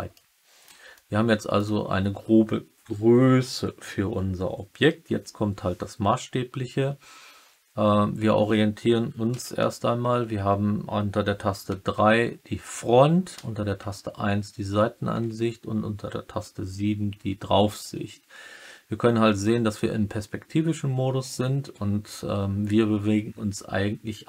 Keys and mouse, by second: 0.1-0.6 middle drag, 0.9-1.5 alt+middle drag, 9.2 KP_3, 13.3 KP_1, 15.0 KP_7.